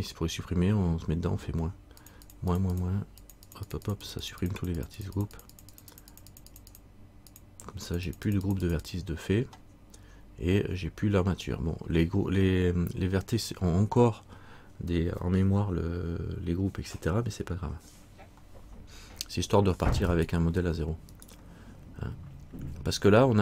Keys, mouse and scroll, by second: 2.2 click, 20.3 right click.